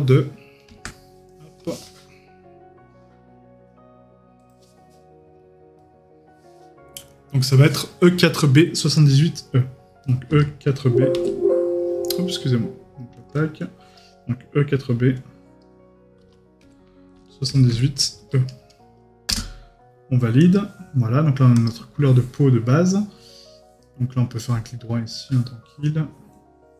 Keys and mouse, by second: 23.8 right click, 24.8 middle click.